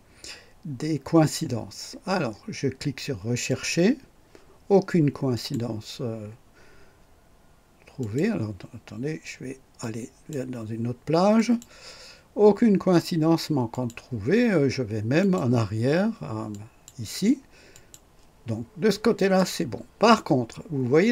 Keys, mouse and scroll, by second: 3.5 click, 5.3 click, 8.0 click, 9.8 click, 11.3 click, 13.7 click, 15.2 click, 16.5 click, 17.7 click, 19.1 click.